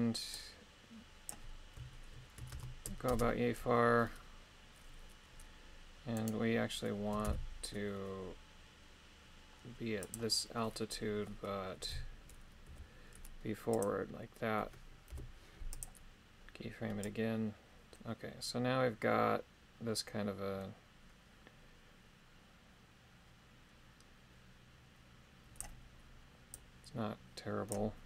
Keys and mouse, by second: 0.3-1.4 drag, 2.5 shift+space, 3.1 shift+space, 6.1 right click, 7.3 shift+d, 10.0 click, 11.9 g, 12.7 y, 13.7 click, 15.1 i, 17.0-25.6 drag, 26.5-27.7 drag.